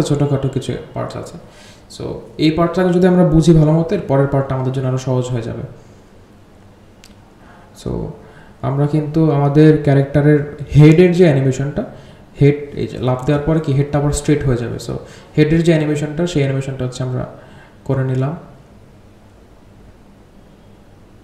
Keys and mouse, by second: 0.0-0.6 drag, 0.7 click, 1.0 g, 1.6-6.5 drag, 7.8 ctrl+click, 8.2-10.3 drag, 10.6 g, 12.0-12.9 drag, 13.4 g, 15.4-16.7 drag, 18.6 space.